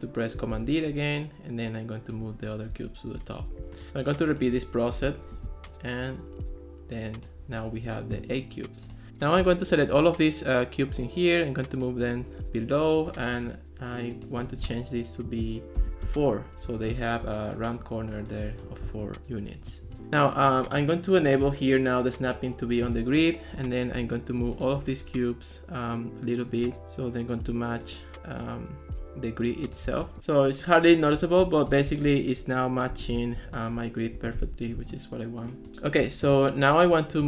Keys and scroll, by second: 0.6 super+d, 5.3 super+d, 15.8 4, 16.1 Return, 32.1 ctrl+s, 33.0 ctrl+x, 34.4 Escape.